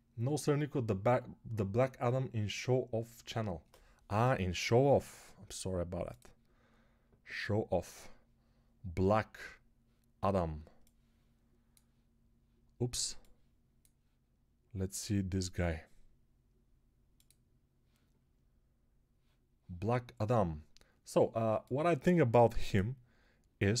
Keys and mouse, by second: 13.1-23.8 drag.